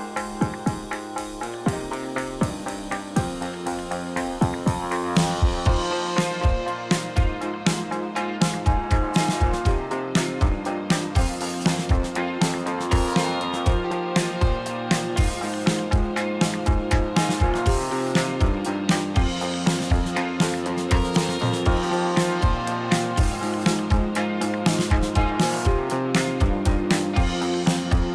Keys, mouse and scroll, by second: 0.6 click, 1.3 click, 1.9 middle click, 2.3 click, 2.8 middle click, 3.4 `, 3.7 `, 5.8 g, 7.5 click, 8.1 g, 10.0 click, 10.3 click, 10.9-12.2 middle drag, 12.2 g, 15.0 middle click, 15.6 click, 15.8-17.0 middle drag, 17.1-18.9 middle drag, 19.7-20.8 middle drag, 21.0-24.1 middle drag, 24.4 a, 25.6 e, 27.7 middle click.